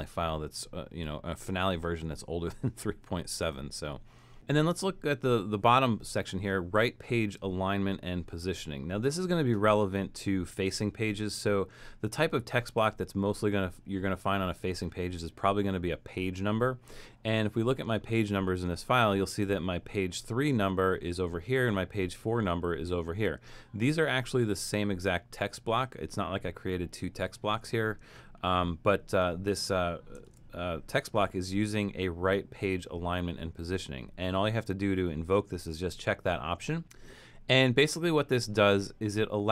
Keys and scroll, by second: 30.3 shift+Return.